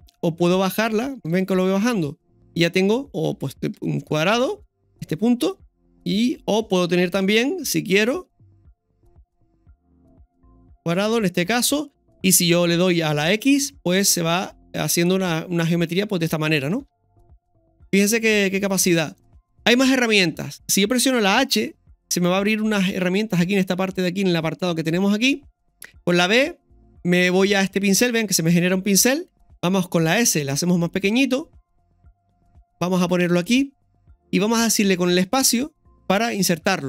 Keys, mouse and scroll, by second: 7.2 KP_1, 17.9 scroll down 1, 36.7-36.8 scroll up 3.